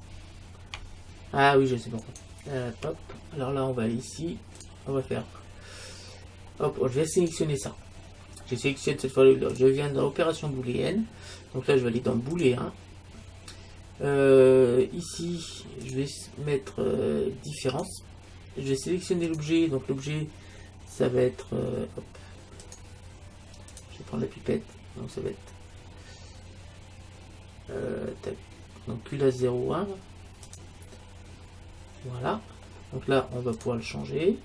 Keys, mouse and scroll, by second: 2.1-3.9 right drag, 4.6-6.4 drag, 7.3-9.1 right drag, 9.6-11.4 drag, 15.9-17.6 drag, 19.3-21.0 drag, 23.7-25.5 drag, 33.6-34.4 drag.